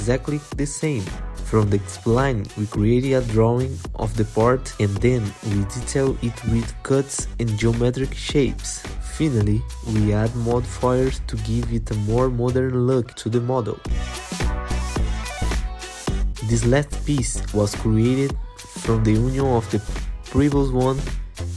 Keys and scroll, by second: 8.1 alt+q.